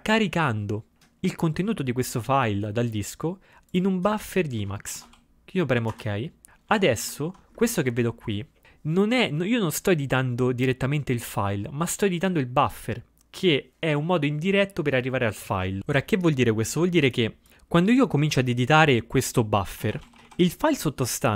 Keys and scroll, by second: 0.0-0.2 typing, 5.0 ctrl+x, 5.2 o, 6.9 ctrl+x, 6.9 ctrl++, 7.1 ctrl+x, 19.6-20.8 typing.